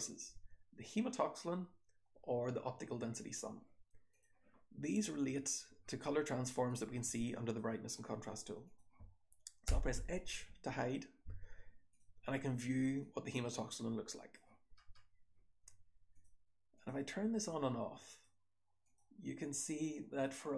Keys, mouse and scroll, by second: 4.0 click, 5.3 click, 8.6 click, 9.6 h, 12.9-14.2 drag, 14.8-16.1 scroll up 1.